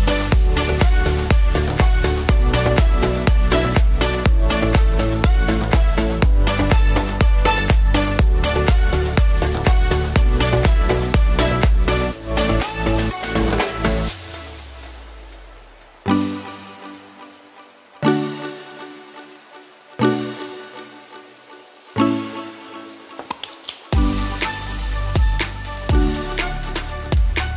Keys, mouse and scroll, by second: 3.2 ctrl+z, 4.4 ctrl+z, 5.4 ctrl+shift+z, 9.3 ctrl+d, 9.9 shift+d, 12.2 p, 13.6 Caps_Lock, 13.9 typing, 18.9 a, 20.8 a, 21.5 e, 23.6 s.